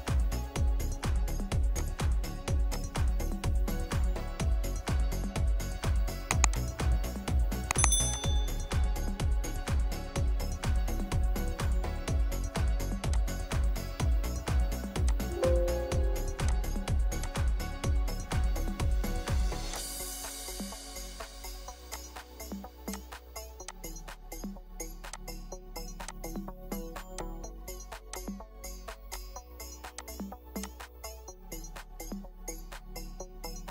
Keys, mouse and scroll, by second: 0.1 scroll down 1, 4.3-4.6 scroll, 4.6 typing, 4.9 Return, 10.5 Return, 10.7 Escape, 14.4 Escape, 18.3 Escape, 20.7 Delete, 31.7 typing.